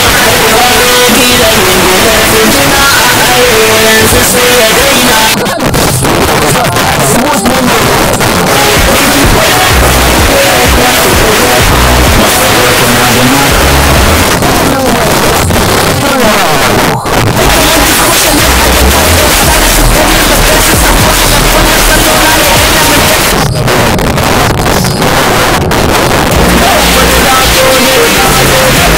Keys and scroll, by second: 5.3 Page_Down, 14.2 Page_Down, 23.2 Page_Down.